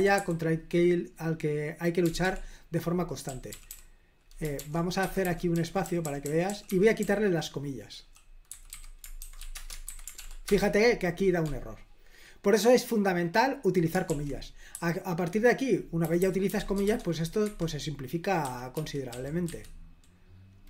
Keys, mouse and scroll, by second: 0.0 typing, 2.1-10.0 typing, 10.3 ctrl+p, 14.1 super+l, 14.8-17.0 typing, 17.5 Escape, 18.5 w, 18.8 w, 19.2 w, 19.5 w.